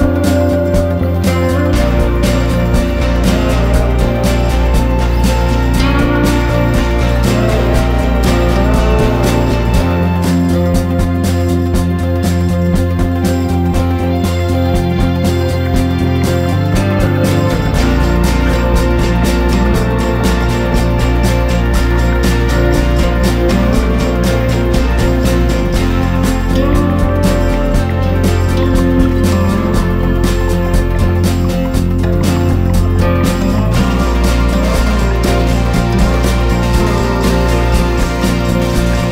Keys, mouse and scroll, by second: 0.2 e, 0.9 Tab, 1.3 click, 1.4 click, 2.5 click, 2.6-3.0 scroll up 2, 3.0 click, 3.6 Tab, 3.8 a, 3.9 s, 6.6 s, 8.0 middle click, 8.7 ctrl+r, 9.2 click, 9.5 g, 10.3 ctrl+b, 11.3 Tab, 11.9 ctrl+2, 12.4 KP_0, 13.0 click, 13.4 drag, 13.5 middle drag, 13.8 scroll up 2, 14.0 shift+middle click, 14.4 shift+middle click, 14.6 scroll up 1, 14.8 click, 14.9 Tab, 15.1 Tab, 15.2 click, 15.3 Tab, 15.8 3, 16.4 click, 16.9 e, 17.5 Tab, 17.8 ctrl+z, 17.8 ctrl+z, 17.9 ctrl+z, 18.4 Tab, 18.5-18.9 middle drag, 18.9 KP_0, 19.4 click, 19.5-21.2 scroll down 4, 21.4 scroll up 2, 22.3 drag, 22.6 shift+click, 22.8 shift+click, 23.0 scroll up 1, 23.1 s, 24.0 click, 24.2-24.6 scroll down 2, 24.6-25.0 shift+middle drag, 25.0 drag, 25.1-25.6 scroll up 2, 25.6 shift+drag, 25.8 shift+drag, 26.6 g, 29.6 click, 29.7-30.3 scroll down 3, 30.5-31.9 shift+middle drag, 31.9 click, 32.5 click, 33.3-33.6 shift+middle drag, 33.6 click, 34.7 click, 34.9 s, 36.2 drag, 36.5-37.1 shift+middle drag, 37.1 click, 37.3 Tab, 37.7 3, 37.8 drag, 38.2 click.